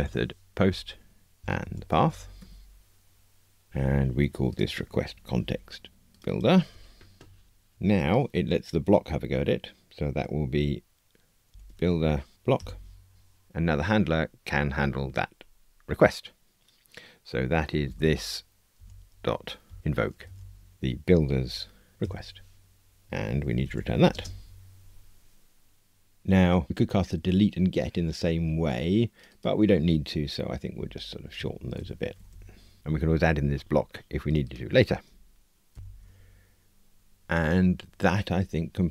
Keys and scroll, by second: 1.4 Return, 2.3 Escape, 5.2 super+c, 12.5 Return, 20.7 Return, 31.4 alt+shift+Right, 32.3 Delete.